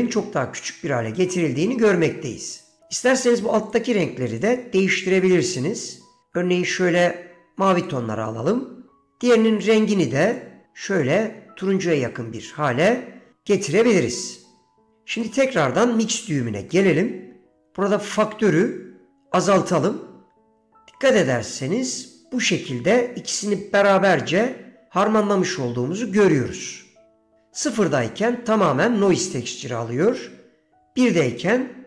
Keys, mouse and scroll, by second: 3.8 click, 4.4 click, 5.2 click, 9.8 click, 15.4 middle click, 16.3 middle click, 16.9 middle click, 17.7-30.9 drag.